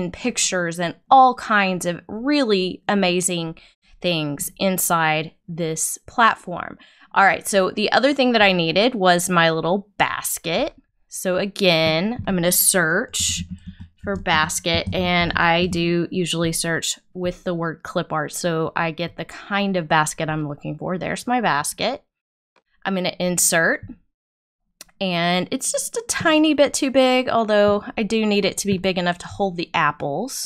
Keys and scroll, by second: 13.1 b.